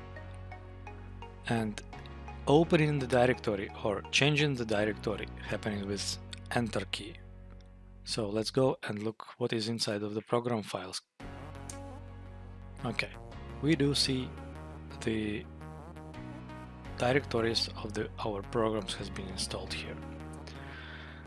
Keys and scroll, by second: 1.0 Up, 4.9 Down, 11.6 Return, 13.5 Down, 15.2 Down, 17.9 Up, 18.7 Left, 20.3 Return.